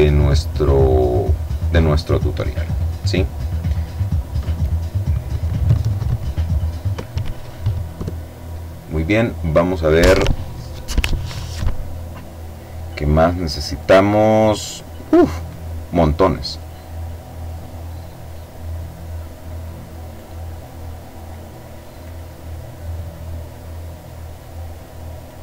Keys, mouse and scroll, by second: 0.0 click, 11.8-13.0 middle drag, 15.2 click, 16.6 click, 17.4 click, 18.3 click, 20.6 click, 22.3 click, 23.4 click.